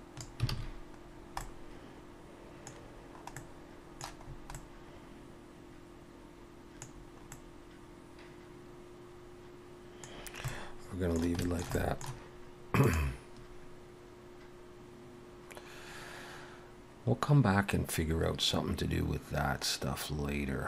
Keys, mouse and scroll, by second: 0.5 alt+a, 1.1 scroll down 1, 1.4 middle click, 2.8-3.2 scroll down 1, 3.3 middle click, 3.3 scroll down 3, 4.3 scroll up 3, 4.5 middle click, 7.0 scroll down 1, 7.3 middle click, 10.1-10.7 scroll down 2, 10.5 middle click, 11.4 shift+middle click, 11.7 middle click.